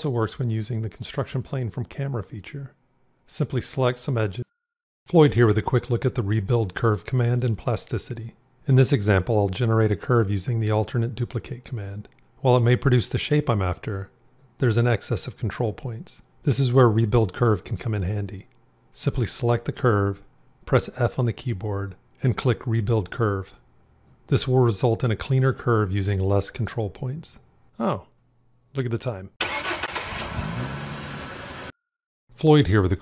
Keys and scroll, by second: 10.5 alt+d, 20.3 f.